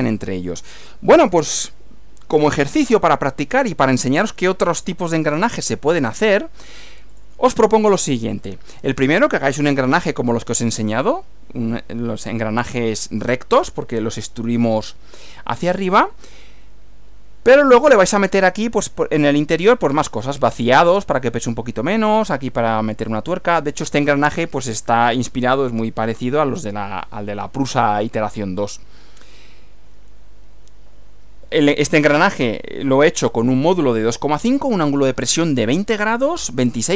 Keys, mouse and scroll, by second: 7.1 click, 29.5 Right.